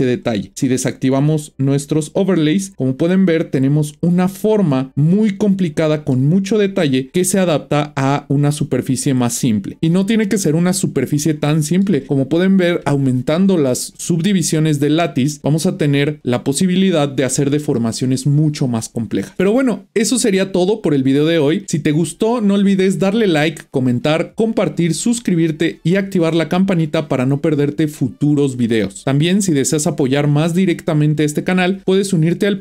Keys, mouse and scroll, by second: 1.8 click, 2.6-5.1 middle drag, 7.1-9.8 middle drag, 11.2-14.0 middle drag.